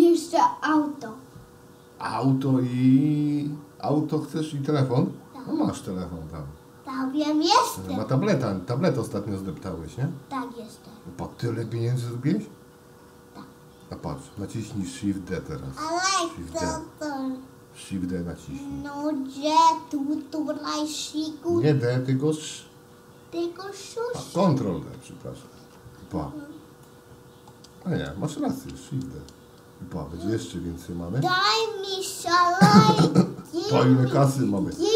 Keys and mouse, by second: 14.4 middle click, 20.2 d, 22.4 ctrl+d, 25.6 ctrl+d, 26.9-27.5 middle drag, 28.8 shift+d, 32.0-33.0 middle drag, 34.2-34.7 middle drag.